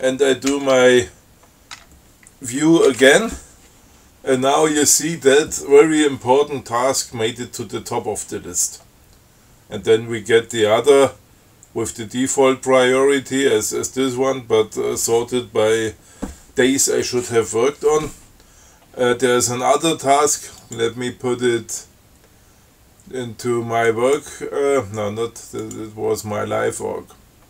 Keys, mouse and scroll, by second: 0.8 ctrl+c, 2.0 a, 3.2 shift+d, 20.9 click, 24.2 click, 25.9 click.